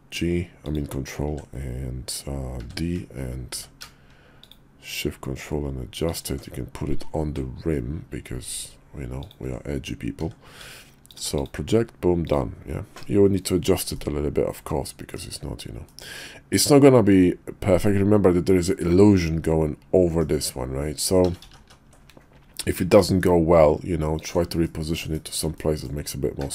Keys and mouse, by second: 1.3 f, 2.7 f, 2.7 d, 3.5 d, 6.9 g, 11.1 alt+d, 12.2 click, 14.0-15.1 middle drag, 15.9-20.2 middle drag, 21.2-21.7 ctrl+z, 22.6 g, 24.6 middle click, 25.1 shift+middle click, 25.6 middle click.